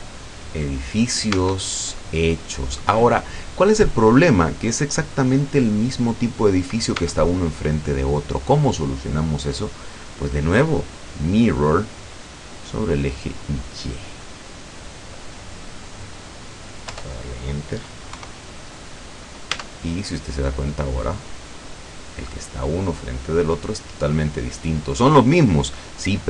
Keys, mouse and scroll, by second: 1.3 Tab, 7.1 Tab, 7.6-9.3 middle drag, 10.3 click, 13.5 click, 16.9 Return, 18.2 KP_0, 19.6 Tab.